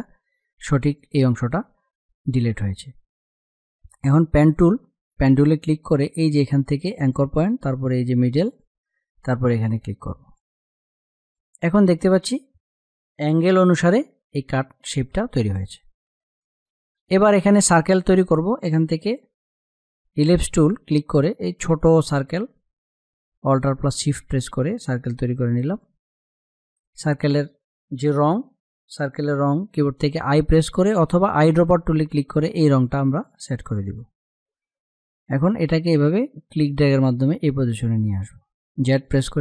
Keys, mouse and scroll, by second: 0.0 click, 3.2 click, 6.3 click, 13.4 ctrl+-, 15.8 click, 19.4-24.6 drag, 30.8-37.3 drag, 37.3 z, 38.3 click.